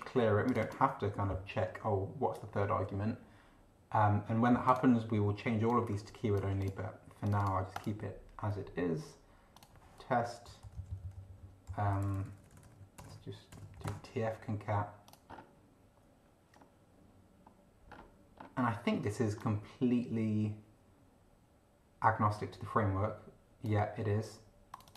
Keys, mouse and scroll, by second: 0.5 click, 4.7 click, 5.7 click, 6.6 click, 7.3 click, 7.7 click, 9.5 click, 10.4 End, 10.6 Left, 12.0-14.2 typing, 15.1 click, 15.3 scroll up 2, 16.5 scroll up 2, 17.4-18.6 scroll up 6, 19.4-23.8 drag, 24.7 click.